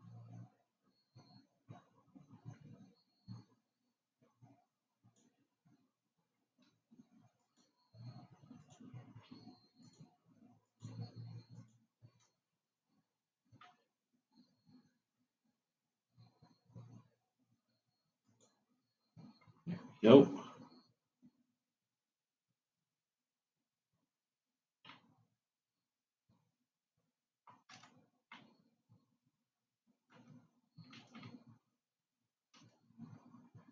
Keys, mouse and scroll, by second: 7.7 shift+click, 9.0 shift+click, 10.1 shift+click, 11.0 shift+click, 11.9 shift+click, 14.3 e, 21.8-23.9 scroll down 4, 23.9-25.8 scroll up 6, 25.8-31.9 middle drag, 31.9 Tab.